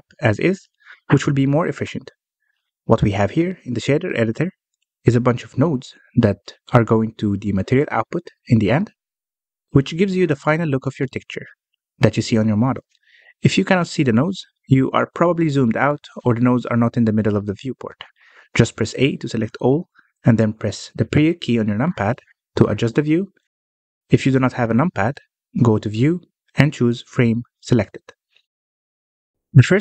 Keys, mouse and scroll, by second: 3.0-3.4 scroll up 2, 3.4 middle click, 4.2-4.9 scroll up 3, 4.9-5.5 middle drag, 5.5-6.4 scroll up 4, 6.4 scroll down 2, 8.2 middle click, 8.5-9.6 scroll up 6, 9.6 click, 10.0 click, 12.8-13.5 scroll down 6, 13.5 middle click, 14.3-15.6 scroll down 1, 15.6-16.7 scroll down 3, 16.7 scroll down 6, 17.2-19.4 middle drag, 19.4 a, 21.5 KP_Decimal, 23.4-24.0 scroll up 5, 24.8-25.9 scroll up 1, 25.9-28.9 drag, 29.2-29.8 scroll up 10.